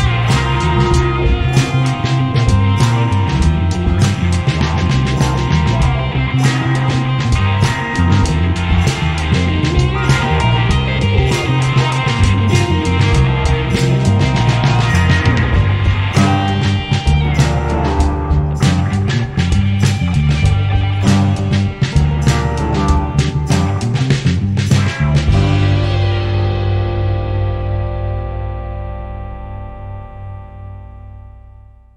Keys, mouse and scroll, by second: 0.7 click, 0.9 g, 1.5 g, 2.5 a, 2.6 ctrl+s, 3.3 Tab, 4.0 f, 4.2 z, 4.3 z, 4.4 Tab, 4.7 Tab, 4.9 w, 5.3 Tab, 5.6 Tab, 8.3 f, 8.6 w, 8.9 Tab, 9.8 Tab, 10.1 g, 10.7 right click, 10.9 g, 11.4 Tab, 12.0 KP_5, 12.1 KP_8, 12.7 a, 12.7 ctrl+s, 13.1 KP_5, 14.5 ., 14.7 r, 18.0 a, 18.1 ctrl+s, 19.3 middle click, 19.6 right click, 19.7 Tab, 19.9 Tab, 20.1 Tab, 20.4-23.3 typing, 23.9 Tab, 24.2 ctrl+s, 25.2 ctrl+2, 25.5 ctrl+z, 26.7 a, 26.8 ctrl+s, 27.5 shift+z, 28.0 shift+z, 29.4-31.6 typing.